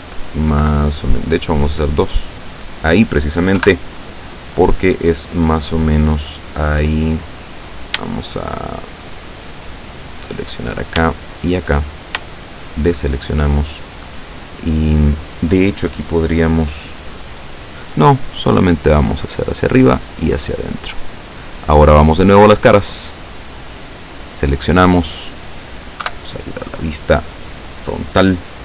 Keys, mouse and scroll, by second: 1.4 scroll up 2, 2.1 click, 3.6 KP_7, 5.1-7.3 middle drag, 7.6 right click, 10.0 click, 11.2 shift+right click, 12.7 shift+right click, 18.1-19.5 drag, 19.9 click, 23.2 click, 24.3 right click, 25.1-25.8 middle drag, 26.1 KP_7.